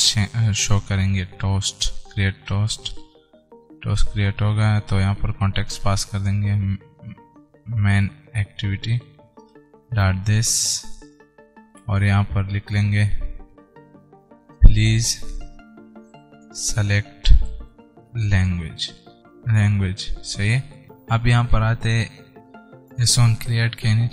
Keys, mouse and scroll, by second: 22.3 scroll up 1, 22.5 click, 24.0 Return.